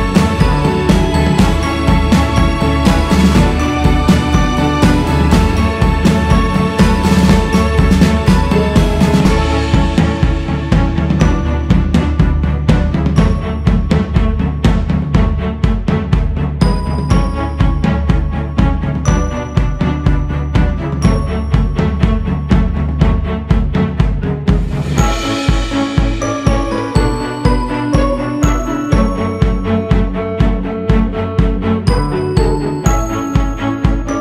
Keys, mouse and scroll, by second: 0.3-1.0 scroll down 3, 1.0-3.0 scroll up 2, 3.0-5.7 drag, 5.7 q, 7.3 f, 11.0-14.1 drag, 22.8-25.8 drag, 29.5 shift+s, 30.5 f, 32.0-34.2 drag.